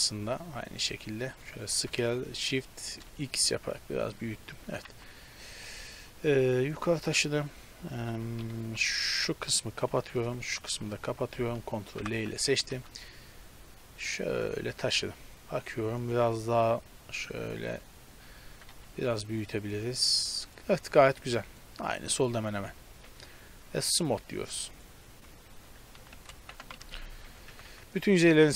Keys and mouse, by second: 1.8 s, 4.7 g, 6.0-7.3 middle drag, 7.3-10.9 typing, 7.7 click, 11.8 middle click, 12.0 ctrl+l, 12.5 g, 16.7-20.0 drag, 18.5 s, 20.9 Tab, 21.9 Tab, 22.5 a, 22.7 a, 23.1 Tab, 25.5 Tab, 25.8 a, 26.0 a, 26.4 ctrl+n, 26.7 Tab, 27.2 Tab, 27.5 a, 27.8 a.